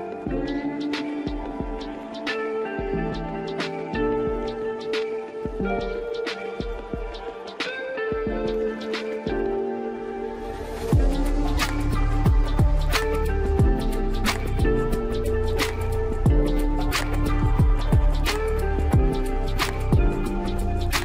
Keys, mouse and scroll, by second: 0.9 click, 1.3-2.6 middle drag, 2.6-3.3 scroll up 4, 3.3-4.4 shift+middle drag, 4.4-4.7 scroll down 1, 4.7-6.2 middle drag, 6.2-7.3 scroll up 4, 7.3-10.8 drag, 10.8-11.3 scroll down 1, 11.3-13.0 middle drag, 13.0-13.5 scroll up 3, 13.5-15.1 shift+middle drag, 15.1 click, 17.0-17.3 scroll up 1, 17.6 scroll up 2, 17.9 scroll down 2, 18.6-21.0 shift+middle drag.